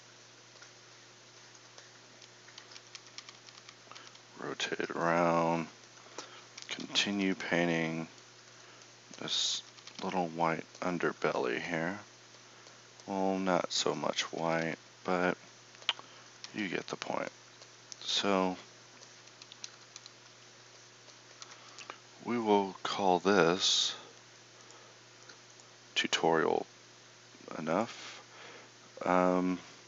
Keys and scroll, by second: 2.5-4.0 typing, 6.6 KP_6, 6.8 KP_6, 7.0 KP_6, 7.2 KP_6, 9.8 KP_6, 10.0 KP_6, 14.4 KP_6, 14.6 KP_6, 16.5 KP_6, 19.5 KP_4, 19.7 KP_4, 20.0 KP_4, 21.4 KP_4.